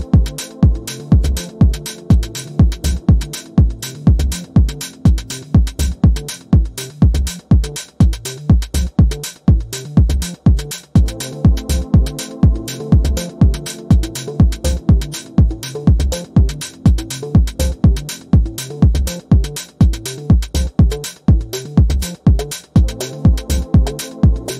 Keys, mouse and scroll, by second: 1.0 ctrl+scroll up 1, 2.0-4.2 alt+shift+drag, 5.4-6.3 alt+shift+drag, 9.4-9.7 ctrl+scroll down 1, 10.5 click, 12.5 click, 14.0-15.5 typing, 16.4 click, 16.9-18.8 ctrl+scroll up 2, 18.8 p, 20.9 click.